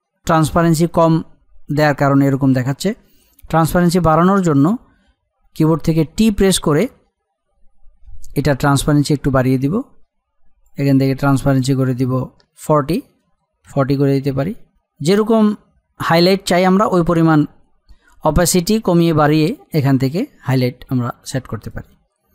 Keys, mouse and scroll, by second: 8.0 t, 9.7-11.3 drag, 14.7-16.5 scroll up 1, 21.6 click.